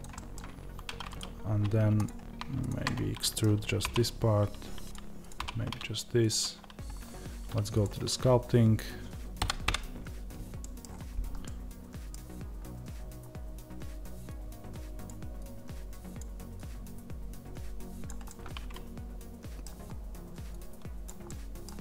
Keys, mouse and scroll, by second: 0.0-1.0 middle drag, 0.5 2, 1.0 click, 2.7-21.8 middle drag, 3.7 e.